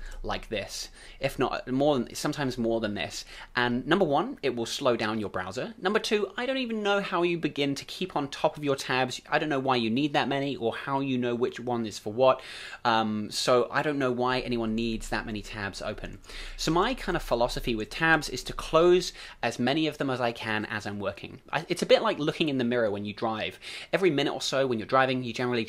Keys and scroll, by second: 14.8 super+w, 15.2 super+w, 15.7 super+w, 16.0 super+w, 16.2 super+w, 16.4 super+w, 16.8 super+w, 17.0 super+w, 17.3 super+w, 17.5 super+w, 17.7 super+w, 17.9 super+w, 18.2 super+w.